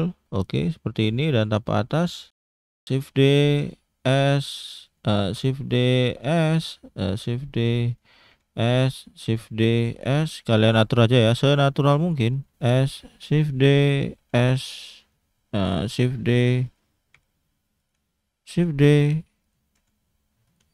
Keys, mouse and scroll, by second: 1.9 click, 2.3 scroll down 2, 2.5 shift+middle click, 2.9 shift+d, 4.0 s, 6.1 s, 8.3 s, 10.0 s, 12.5 s, 14.2 s, 17.1 s, 19.8 s.